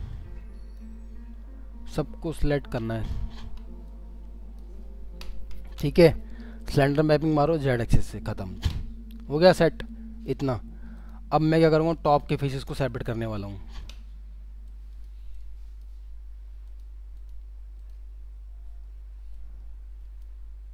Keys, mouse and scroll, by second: 2.3 alt+middle click, 3.3-3.9 scroll down 1, 18.6 scroll up 1.